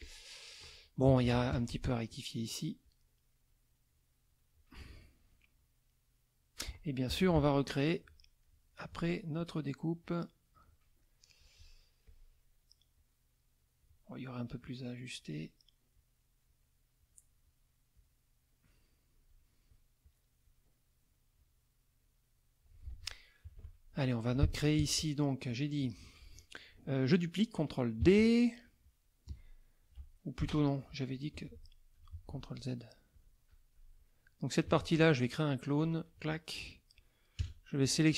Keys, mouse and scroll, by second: 0.0 click, 1.1 z, 1.2 click, 1.5 F2, 2.1 click, 2.8-4.5 drag, 5.6-6.7 drag, 7.1 KP_Subtract, 7.9 middle click, 8.4 middle click, 9.4 click, 10.0 click, 11.0 middle click, 12.0 click, 12.9-14.0 drag, 14.6 click, 15.9 click, 16.9 click, 17.9-19.5 drag, 20.0 click, 21.3-22.8 drag, 22.9 F1, 23.4 KP_Subtract, 24.0 middle click, 24.5 F2, 24.5 middle click, 25.0 click, 25.5 click, 28.0 ctrl+d, 30.4 Delete, 31.3 F1, 32.1 ctrl+z, 32.5 ctrl+click, 33.1 click, 33.9 click, 34.6 ctrl+z, 35.8 click, 37.4 KP_Add, 37.9 middle click.